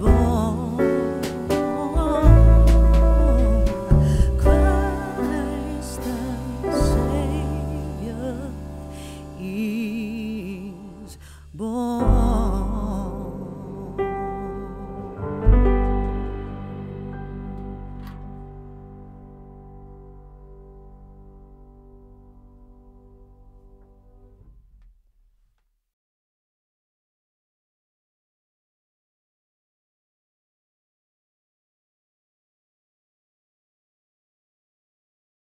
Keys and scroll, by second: 11.6 shift+z, 27.3 shift+z.